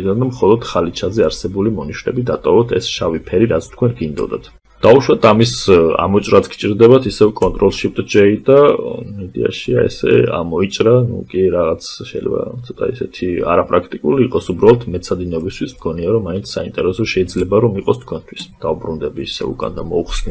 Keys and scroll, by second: 6.4 ctrl+shift+j.